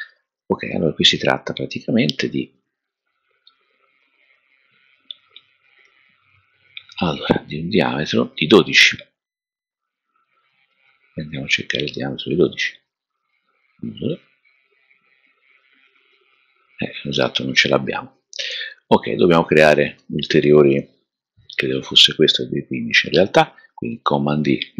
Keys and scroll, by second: 23.8 super+d.